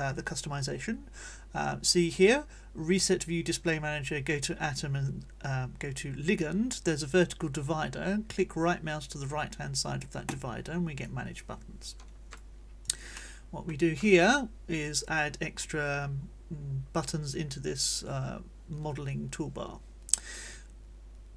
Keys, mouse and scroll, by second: 10.3 right click, 12.4 click, 13.1 click, 15.2 middle click, 15.6 click, 15.6 middle click, 15.9 click.